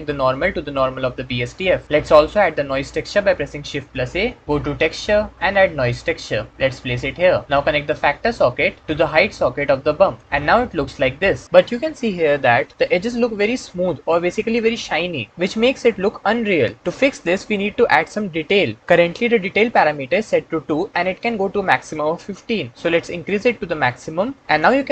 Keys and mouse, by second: 0.0-0.6 drag, 3.8 shift+a, 8.8-10.1 drag, 23.0-24.4 drag.